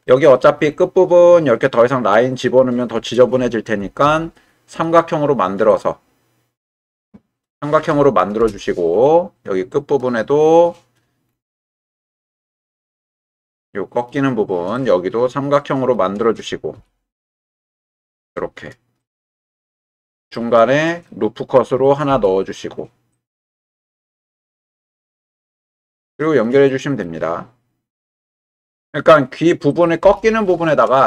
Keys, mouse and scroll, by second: 0.1 middle click, 4.0 k, 9.0-10.7 middle drag, 10.7 click, 11.9-14.1 middle drag, 14.8-15.9 middle drag, 16.7 k, 20.3 middle click, 22.1 ctrl+r, 24.5 click, 26.0 shift+middle click, 26.7 middle click, 27.9 k.